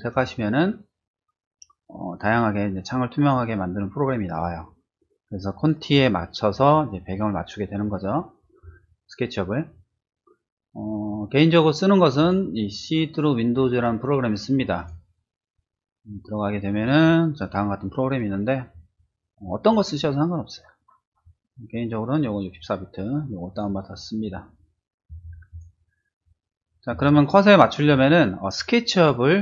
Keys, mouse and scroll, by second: 0.1 click, 12.2 click, 14.8 click, 17.4-17.8 scroll down 2, 18.3-19.3 scroll down 2, 19.3-20.0 scroll down 1, 20.0-21.2 scroll up 1, 21.2 scroll down 1, 21.7 scroll up 1, 23.5 click, 25.5 click, 27.1-28.5 shift+middle drag.